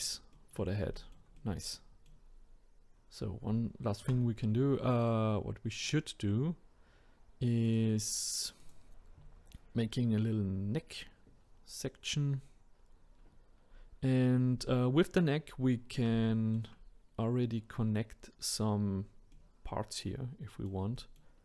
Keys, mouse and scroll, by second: 4.0 Tab, 5.8-11.6 drag, 13.6-14.6 scroll down 1, 14.6-15.1 scroll up 1, 15.1-16.3 scroll down 1, 16.3-21.4 shift+middle drag.